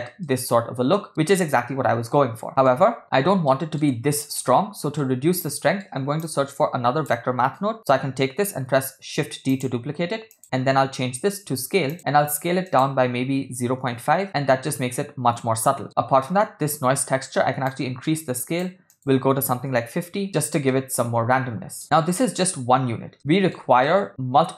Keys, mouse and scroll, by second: 0.3-1.1 shift+middle drag, 2.5 middle click, 3.5 shift+middle drag, 5.0 shift+middle click, 5.6 middle click, 6.2 click, 8.7 shift+d, 10.3-11.9 drag, 12.7-14.1 drag, 14.6-15.8 shift+middle drag, 17.7-18.7 drag, 18.9-20.1 drag, 20.7-22.2 shift+middle drag, 23.1-23.5 shift+middle drag, 23.9 ctrl+middle drag.